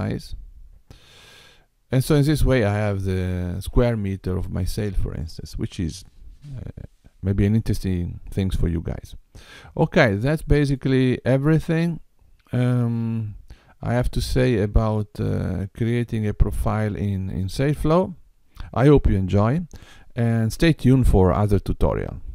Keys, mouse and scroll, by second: 0.8 click, 10.4 middle click.